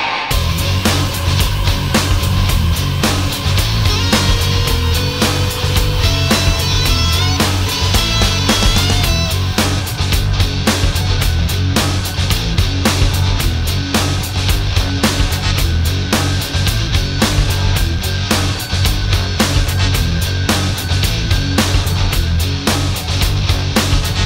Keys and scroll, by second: 0.2 ctrl+shift+a, 19.1 alt+space.